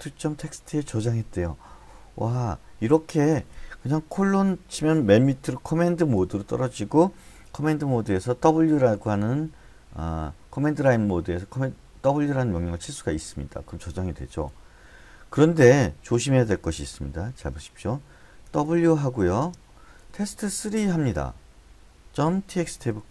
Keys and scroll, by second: 4.2 shift+;, 8.4 w, 13.3 Return, 18.4-23.1 typing.